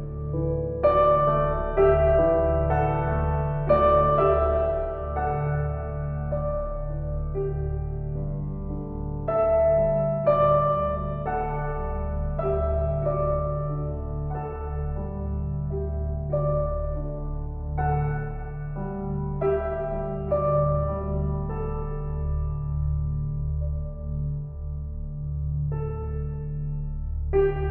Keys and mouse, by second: 0.0 click, 0.8 click, 2.2 click, 3.2 click, 3.4 click, 5.7 click, 6.1 click, 6.6 click, 8.2-12.7 typing, 14.9-19.2 drag, 16.9 typing, 19.7 ctrl+s, 20.2-22.2 ctrl+alt+drag, 22.0 ctrl+s, 22.5 alt+a, 25.0 ctrl+s, 26.5 typing.